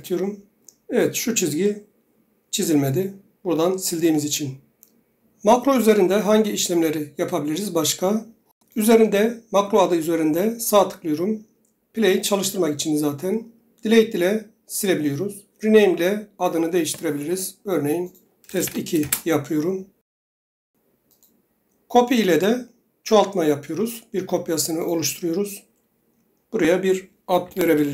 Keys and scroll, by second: 18.3 BackSpace, 18.5 2, 18.9 Return, 27.1-27.9 typing.